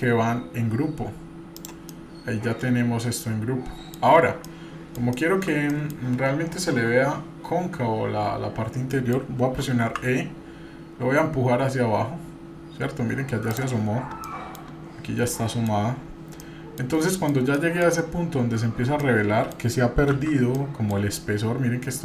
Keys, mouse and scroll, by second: 1.9-4.0 middle drag, 4.4 scroll down 1, 4.5 middle click, 5.1 shift+middle click, 5.7 middle click, 8.9 middle click, 9.9 e, 14.2-14.6 middle drag, 14.2-15.3 scroll up 2, 15.3 middle click, 16.4-16.8 middle drag, 16.4 scroll down 2, 17.0 middle click, 17.5 shift+middle click, 18.2-19.0 scroll up 1, 19.0 middle click, 20.2 shift+z, 20.5 middle click.